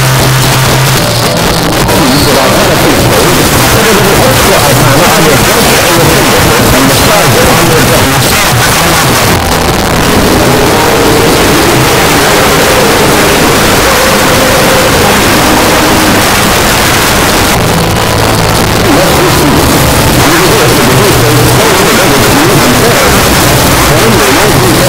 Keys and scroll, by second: 8.0 Page_Down, 16.2 Page_Down, 24.8 space.